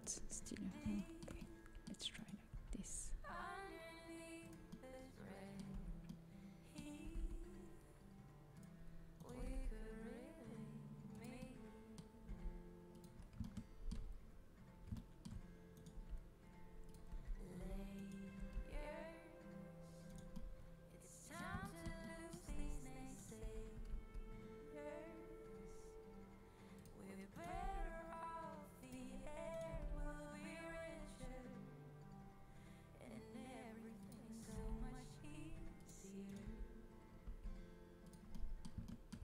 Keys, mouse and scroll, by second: 0.9-3.7 middle drag, 2.5 g, 4.7-5.7 middle drag, 5.7 z, 7.0 g, 9.3 g, 12.2 g, 15.9-17.5 drag, 15.9 g, 17.1 z, 17.5 z, 18.3 g, 20.4 middle click, 21.7 middle click, 22.4 z, 23.1 click, 23.4 z, 23.7 g, 24.1-25.1 drag, 27.5-29.1 drag, 27.5 g, 29.7-31.5 drag, 29.7 g, 34.5 g, 36.4 g, 38.8-39.2 middle drag.